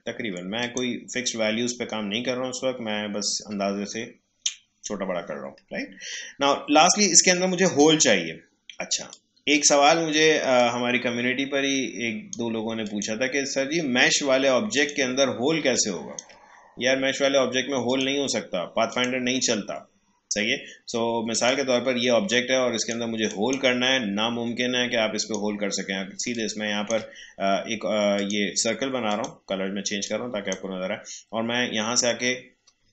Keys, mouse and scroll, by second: 0.6 click, 9.1-17.8 drag, 17.8 click, 21.3-31.9 drag, 31.9 right click.